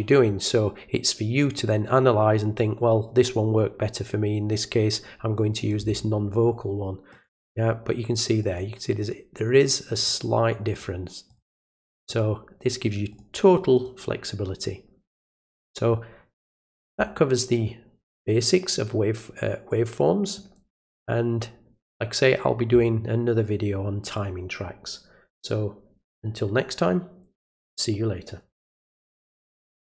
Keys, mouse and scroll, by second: 5.6 click, 7.1 click, 8.4 click, 9.0 click, 9.9 click, 10.7 click, 11.2 click, 12.0 click, 12.6 click, 13.1 click, 13.7 click, 15.1 click, 18.1-20.3 drag, 29.8 click.